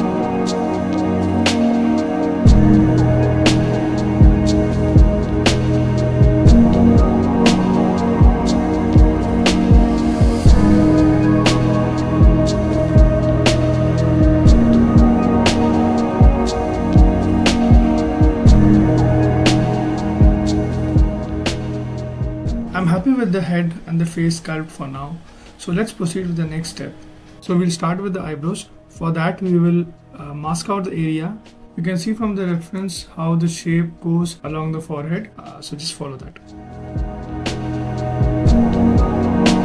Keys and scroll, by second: 7.5 ctrl+z, 8.8 ctrl+z, 10.8 ctrl+z, 17.2 b, 17.4 m, 17.7 v, 19.1 s, 30.4 ctrl+alt+z, 31.0 z, 33.3 s.